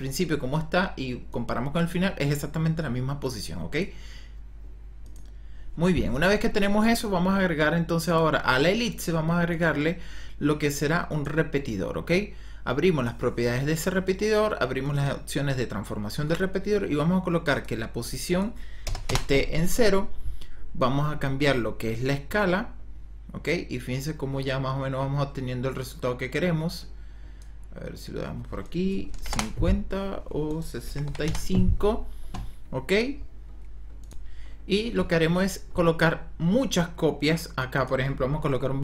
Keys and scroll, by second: 18.7 KP_0, 19.0 Return, 28.9 KP_5, 29.2 KP_0, 29.3 Return, 30.7 KP_6, 31.0 KP_5, 31.2 Return.